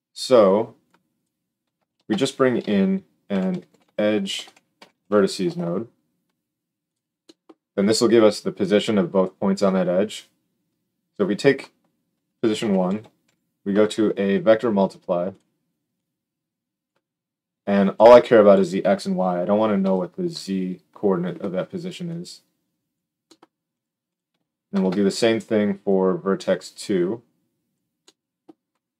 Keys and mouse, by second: 1.2-10.8 middle drag, 1.8 shift+a, 10.8-15.3 drag, 15.3 middle click, 15.9-23.7 drag, 23.7 middle drag, 24.0 click, 24.7 shift+d, 26.8-28.9 drag.